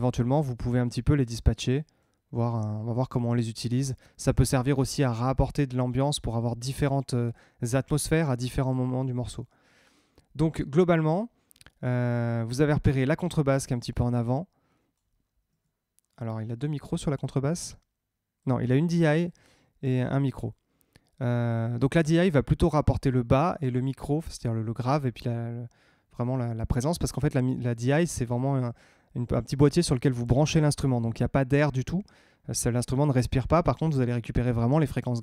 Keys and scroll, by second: 15.4 Tab, 20.2 Tab.